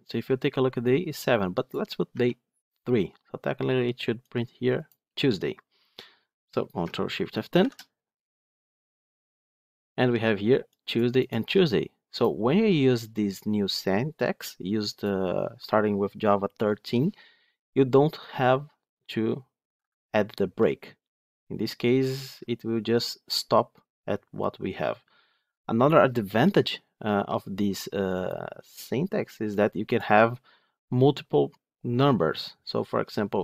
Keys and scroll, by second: 7.5 ctrl+shift+F10.